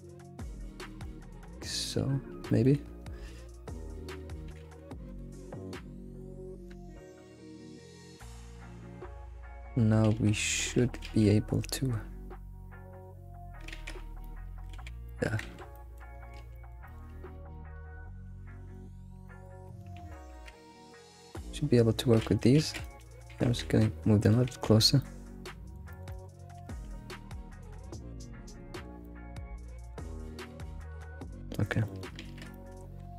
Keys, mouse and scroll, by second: 1.6-2.8 shift+middle drag, 2.8 scroll up 2, 4.5 g, 5.4-6.2 scroll down 1, 6.2-7.2 shift+middle drag, 7.2 alt+x, 8.2 alt+x, 10.1 alt+x, 11.0 alt+x, 12.1 alt+x, 13.1-13.7 scroll up 3, 13.7 alt+x, 13.9-14.2 scroll down 2, 14.2 middle click, 14.7 alt+x, 15.1 alt+middle drag, 15.4 alt+z, 15.7-16.2 middle drag, 16.2 scroll, 16.3 scroll down 1, 16.4 alt+x, 16.5-18.1 middle drag, 18.1 click, 18.7 middle click, 19.4 alt+middle click, 19.7 shift+middle click, 20.1-20.5 scroll up 3, 20.5 alt+x, 20.9 click, 21.2 shift+click, 21.8-22.1 scroll up 1, 22.2 alt+x, 22.6 alt+x, 22.8 click, 23.3 g, 24.5 alt+x, 24.8 scroll down 1, 25.0 middle click, 26.1 alt+middle click, 26.5 scroll up 3, 26.6 alt+x, 27.7 g, 29.0 middle click, 30.2 scroll up 4, 31.3 scroll down 1, 31.8 alt+middle click, 32.5 shift+middle click, 32.8-33.1 scroll up 6.